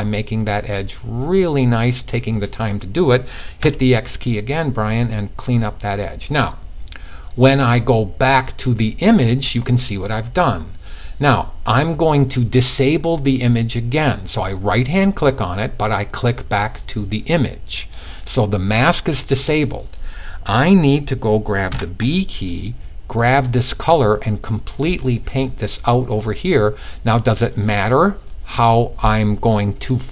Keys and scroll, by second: 3.1 x, 21.2 b.